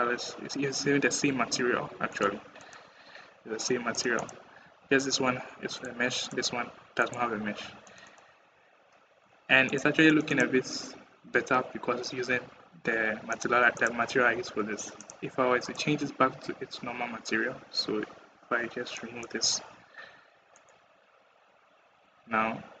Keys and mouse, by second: 1.9 click, 2.4 click, 3.7 click, 4.0 click, 4.4 g, 6.3 g, 7.7 click, 7.9 click, 9.5 click, 10.1 click, 13.1 click, 18.8 drag, 20.4 middle drag.